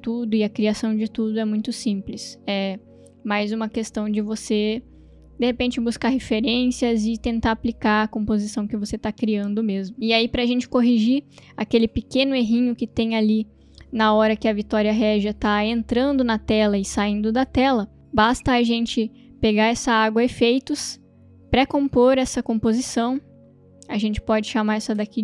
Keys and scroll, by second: 13.5 space.